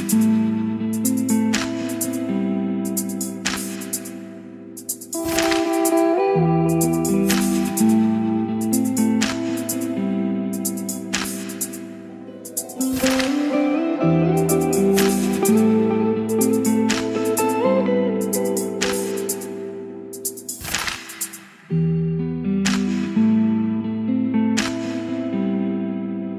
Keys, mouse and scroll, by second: 1.1 space, 1.9-6.2 drag, 6.1-7.5 typing, 8.3 click, 9.2 ctrl+r, 9.8-20.2 drag, 20.2-21.7 middle drag, 21.7 click, 22.4 Tab, 23.4-25.8 typing.